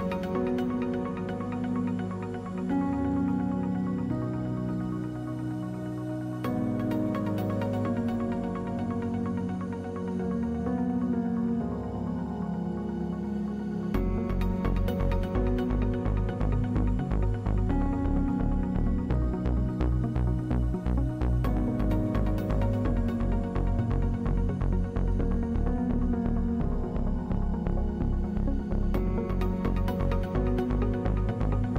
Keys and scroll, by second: 1.7 \, 3.0 Delete, 4.9 x, 14.0 p, 18.7 \, 21.2 F3, 22.2 x, 25.5 |, 31.1 x.